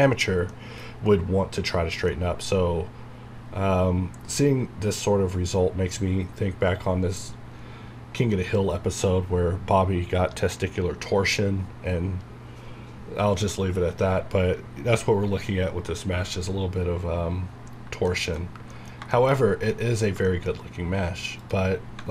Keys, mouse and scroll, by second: 0.5 middle click, 0.9 scroll up 1, 1.5 scroll down 1, 2.1-6.2 middle drag, 6.2-8.0 scroll down 1, 16.3 scroll down 1, 17.5 scroll down 1, 18.1 shift+middle click, 18.4 shift+scroll up 2, 18.7 middle click, 20.9 scroll down 1, 21.4 click.